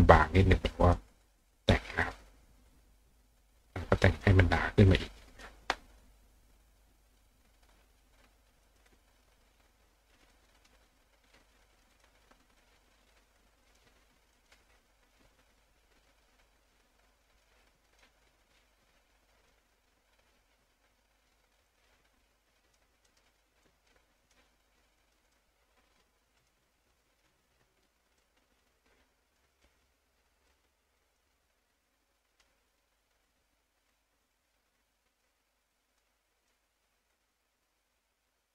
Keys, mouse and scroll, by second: 0.8 click, 2.0 click, 2.7 click, 3.8 click, 4.9 click, 6.5 click, 7.1 click, 8.7 click, 8.9 click, 10.2 click, 10.6 click, 11.8 click, 11.9 click, 12.6 click, 13.7 click, 14.4 click, 15.0 click, 15.7-18.0 drag, 18.7 click, 21.7-22.8 drag, 23.1 click, 23.7 click, 24.2 click, 25.0 click, 25.3 click, 26.4 click, 27.3 click, 29.6 click, 31.2-32.4 drag, 33.9-35.2 drag, 36.0 click, 37.1 click.